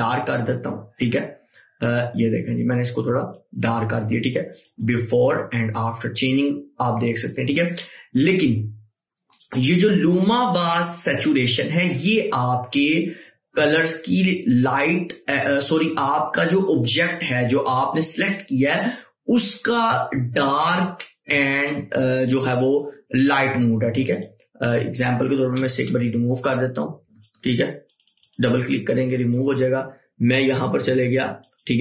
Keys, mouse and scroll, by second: 8.6 click, 12.1 click, 12.2 click, 14.7 click, 20.1-26.7 drag, 27.2 ctrl+Num_Lock, 27.2 click.